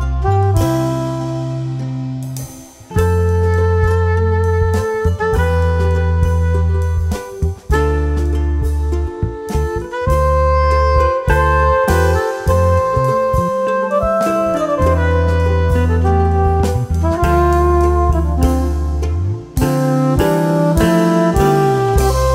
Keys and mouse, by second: 1.7 alt+i, 1.8 alt+a, 2.4 s, 3.4 click, 6.6 ctrl+d, 6.9 z, 7.3 click, 10.0 click, 10.4 space, 10.5 click, 10.9 space, 11.2 click, 12.1 space, 12.4 click, 12.6 space, 13.0 click, 15.5-18.6 typing, 17.4 click, 18.7 click, 21.8 q.